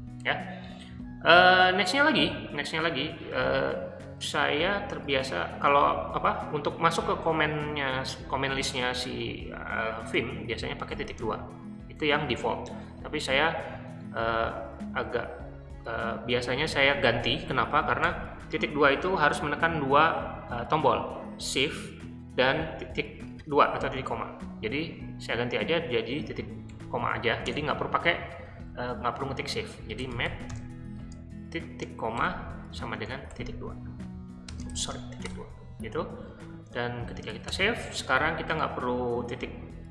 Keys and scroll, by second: 10.9 shift+;, 18.0 BackSpace, 26.7 shift+o, 27.5 Return, 29.7-30.8 typing, 32.2-37.8 typing.